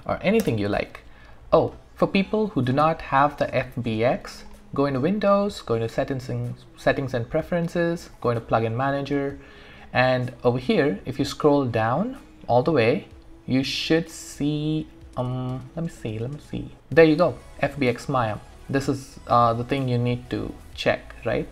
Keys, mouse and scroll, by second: 0.0-0.3 typing, 0.4 Return, 3.9 click, 8.2 click, 10.7-11.3 scroll down 1, 12.8-14.3 scroll up 1, 14.3-16.7 scroll down 1, 16.7-18.2 scroll up 1.